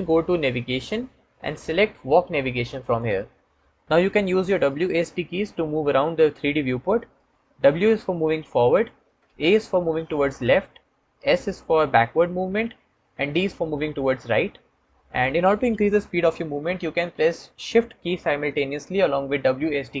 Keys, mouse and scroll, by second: 7.6 w, 9.7 a, 11.4 s.